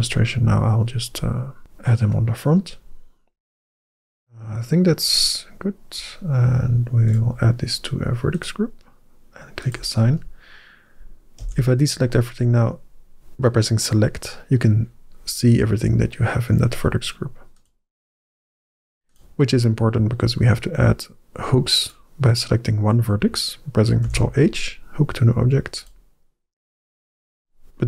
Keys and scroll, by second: 11.8 alt+a, 23.9 ctrl+h.